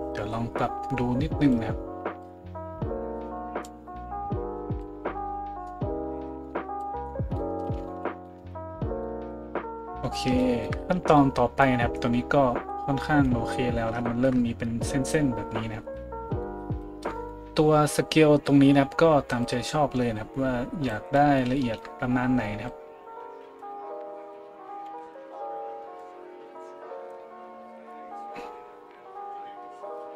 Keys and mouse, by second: 7.9 a.